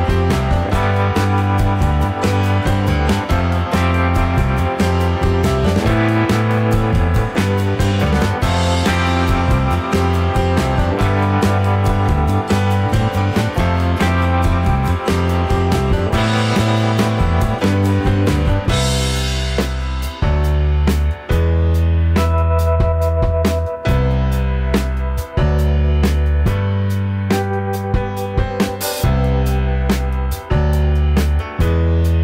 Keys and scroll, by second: 1.1 ctrl+t, 4.4 Return, 9.9 Return, 13.3 ctrl+j, 14.4 ctrl+t, 24.4 Down, 25.2 Right, 27.1 Return.